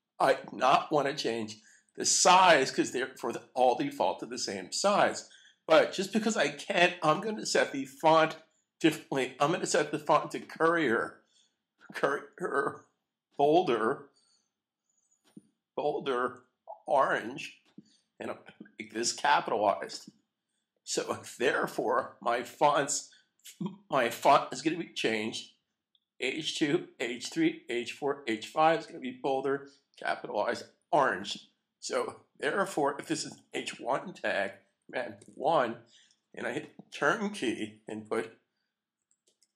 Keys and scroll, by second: 35.2 super+1, 37.4 Return.